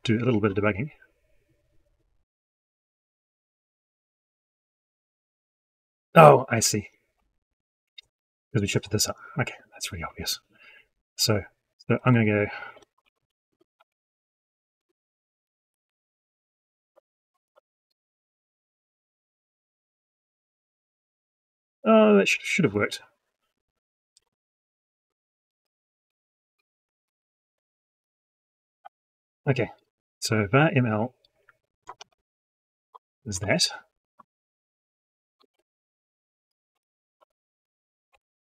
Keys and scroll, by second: 16.9 ctrl+x, 17.7 ctrl+v, 25.1 ctrl+z, 31.7 ctrl+x, 33.2 ctrl+v.